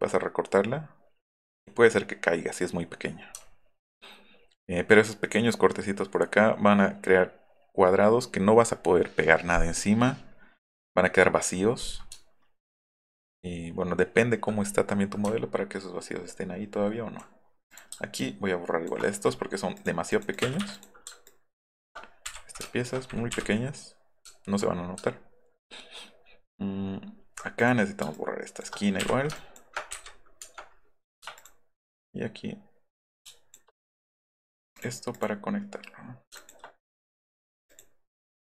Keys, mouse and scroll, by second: 3.4 alt+middle click, 3.7 alt+middle drag, 4.2 alt+middle click, 4.4 alt+middle click, 12.2 alt+middle click, 12.9 alt+middle drag, 13.3 alt+middle click, 13.9 alt+middle click, 15.2 alt+middle click, 16.1 alt+middle drag, 16.6-17.0 alt+middle drag, 17.7 click, 18.2 click, 19.7 click, 20.6 Escape, 21.7 ctrl+click, 22.6 ctrl+click, 23.3 Delete, 24.3 alt+scroll down 1, 25.1 alt+middle click, 25.6 alt+middle click, 26.2-27.1 alt+scroll up 6, 27.6 click, 28.2 ctrl+click, 29.4 ctrl+click, 29.9 Insert, 31.4 ctrl+click, 32.0-33.5 ctrl+drag, 35.1 click, 36.3 ctrl+click, 37.7 click.